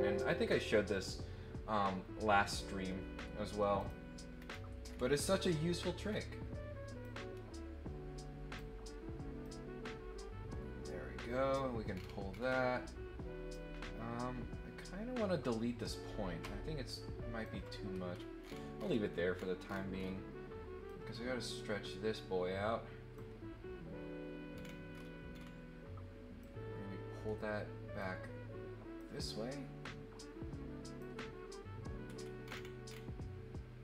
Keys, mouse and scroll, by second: 0.1 click, 3.8 click, 4.4 scroll down 4, 4.8 scroll up 2, 5.4 scroll up 2, 6.1 scroll up 2, 7.0-8.5 drag, 9.4-11.5 drag, 11.9 scroll down 2, 12.3 scroll up 2, 12.4 scroll down 2, 13.5-17.4 drag, 17.9 scroll up 2, 18.4 scroll down 1, 18.8 scroll up 2, 19.3-19.7 scroll down 2, 19.9 scroll up 1, 20.8-23.1 drag, 24.5 scroll down 1, 24.9-25.3 scroll up 2, 26.3-27.9 drag, 28.9-30.9 drag, 32.0 scroll up 1, 32.4-33.0 scroll down 4.